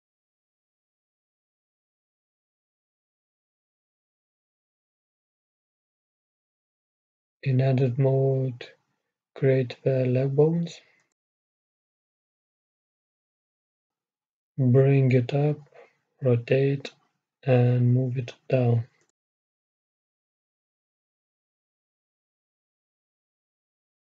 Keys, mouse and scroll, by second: 3.6 middle click, 3.9 middle click, 4.0-5.3 middle drag, 5.3 a, 5.9 shift+a, 8.4 Tab, 10.3 shift+a, 11.0 middle click, 12.2-14.1 right drag, 14.1 g, 17.5 r, 23.1-24.0 drag.